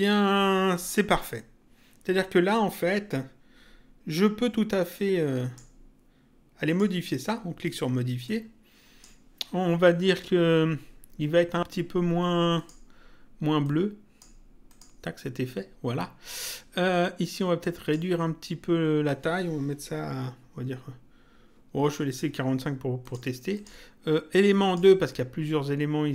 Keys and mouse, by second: 0.7 click, 4.8 click, 6.6 click, 8.2 click, 12.6 click, 17.6 click, 23.0 click.